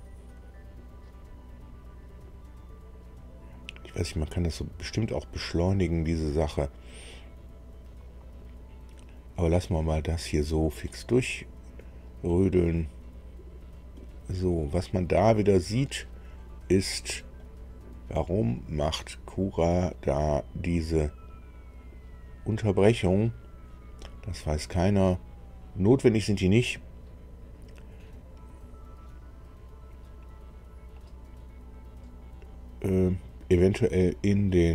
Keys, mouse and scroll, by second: 15.4 scroll up 1, 16.3-16.6 scroll up 1, 16.8-17.1 scroll up 1, 17.4-20.2 right drag.